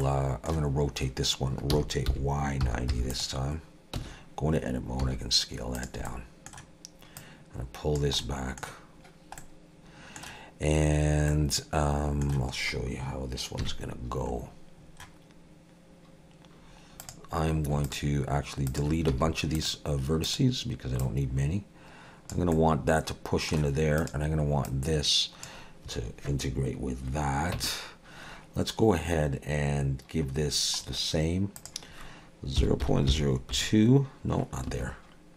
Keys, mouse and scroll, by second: 0.0 middle click, 1.7 r, 4.0 Tab, 5.0 s, 6.1 middle click, 7.2 click, 8.2 middle click, 9.4 middle click, 11.3 middle click, 13.6 KP_3, 14.3-14.9 scroll up 2, 14.9-16.7 scroll down 1, 16.7-17.0 scroll down 1, 17.0 click, 17.9 shift+click, 18.9 shift+click, 19.1 x, 20.3 click, 21.0 click, 22.5 middle click, 24.0 click, 24.7 click, 27.6 Tab, 30.3-31.6 scroll down 5, 31.6 click, 31.6-33.9 scroll down 1.